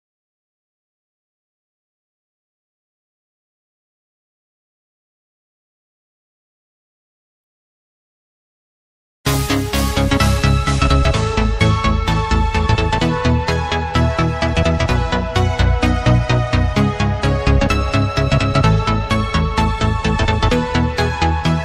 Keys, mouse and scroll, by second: 0.5 shift+click, 1.6 click, 3.0 shift+click, 3.8 click, 6.8 shift+click, 7.7 shift+click, 8.4 shift+click, 9.3 click, 10.4-11.4 scroll up 2, 12.3-13.6 drag, 14.5 shift+click, 15.6-17.9 drag, 17.9-18.6 scroll down 1, 18.6 Tab, 19.4 click, 21.3 KP_7.